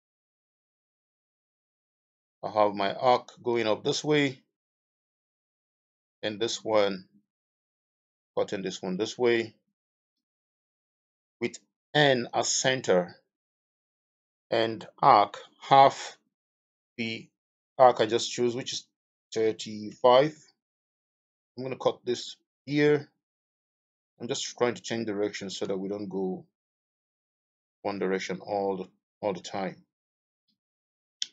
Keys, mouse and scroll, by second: 19.3-19.8 typing, 20.1 Return, 28.2 Escape.